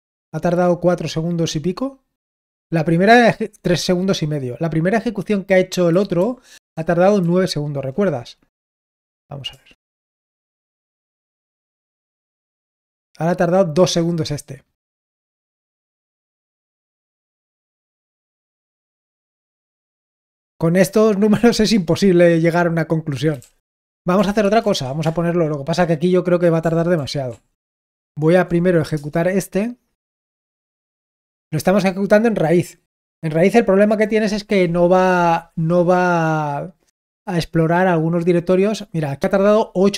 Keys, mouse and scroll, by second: 6.1 ctrl+p, 6.6 ctrl+p, 7.1 ctrl+p, 9.4 Return, 16.4 ctrl+p, 16.9 ctrl+p, 17.7 Return, 23.0-24.6 typing, 25.0 Return, 26.9 ctrl+p, 27.2 ctrl+p, 28.8 Return.